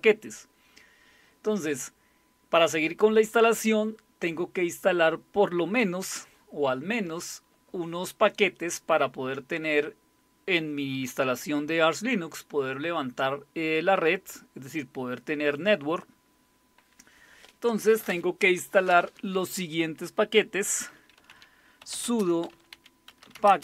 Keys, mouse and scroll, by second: 20.9-23.6 typing.